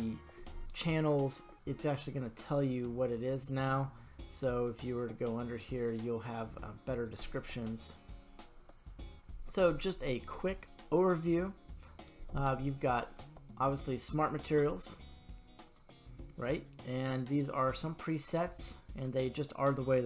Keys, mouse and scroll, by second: 9.3 click, 13.1 click, 15.6-20.0 drag.